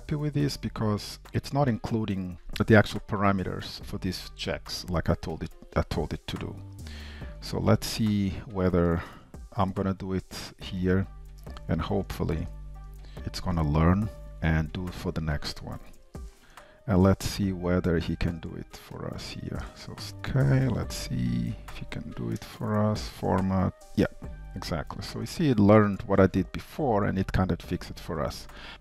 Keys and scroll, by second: 10.8 Return, 14.0 super+x, 16.4 Return, 19.5 super+x, 20.1 ctrl+shift+Left, 21.1 alt+\, 24.1 Tab, 25.2 Tab, 26.3 super+s.